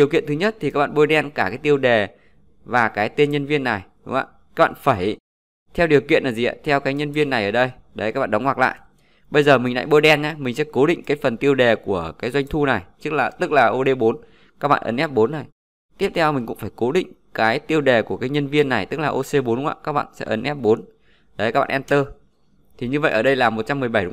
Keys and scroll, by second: 14.1 F4, 19.7 F4.